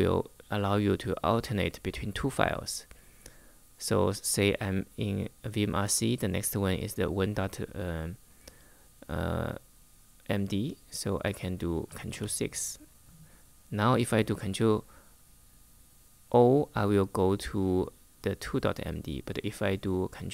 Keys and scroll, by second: 11.8 ctrl+6.